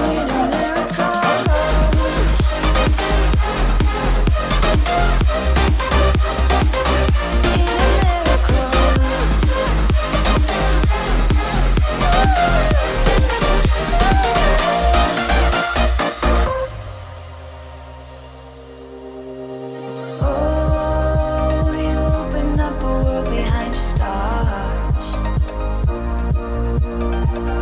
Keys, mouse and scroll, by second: 0.6 click, 1.5 shift+e, 2.5 click, 4.0 right click, 5.0 click, 6.0-6.5 scroll up 1, 7.1 shift+middle click, 7.5-10.7 middle drag, 10.7-12.6 scroll up 1, 13.1 shift+x, 13.8 click, 14.6 m, 15.2 ctrl+click, 16.2-17.3 scroll up 1, 17.3-17.9 scroll up 1, 19.4 click, 19.5 space, 22.3 scroll down 1, 23.2 click, 23.6-24.6 scroll up 1, 24.8 f, 25.2 click, 26.1-27.3 typing, 27.0 Return.